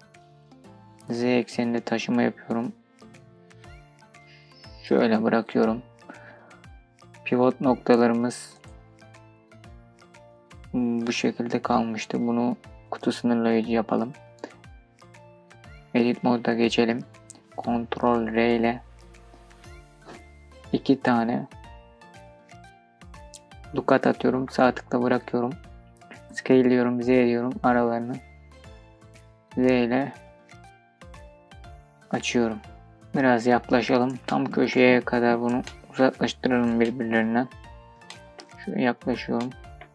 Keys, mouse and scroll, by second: 0.7 z, 4.4 click, 5.3 scroll down 2, 7.3-8.1 scroll down 2, 8.1-12.6 drag, 15.1 Tab, 16.0-17.1 scroll up 1, 17.7 ctrl+r, 24.1 right click, 25.9 s, 26.3 z, 31.5-34.0 drag, 34.9 scroll up 2, 36.0 scroll up 1, 36.1 shift+middle click, 36.9-37.5 scroll up 3, 37.5 shift+middle click, 38.1-38.6 scroll up 2, 38.7 shift+middle click, 39.2 scroll up 2.